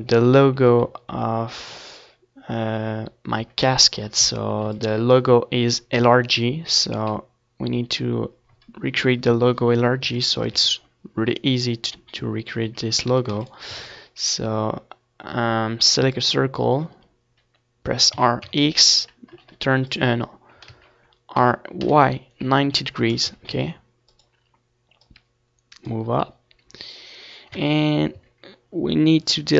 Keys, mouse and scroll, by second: 1.3 ctrl+s, 3.4 z, 3.8 a, 4.1 ctrl+s, 4.6 shift+a, 8.9 r, 10.9-12.7 drag, 11.6 ctrl+z, 12.2 r, 14.0-17.8 drag, 14.5 s, 18.7 Tab, 19.4 a, 20.9 c, 22.7-24.3 right drag, 24.9 x, 25.8 Tab, 26.3 Tab, 27.5 ctrl+z, 27.8 ctrl+z, 28.5 w, 29.2 x.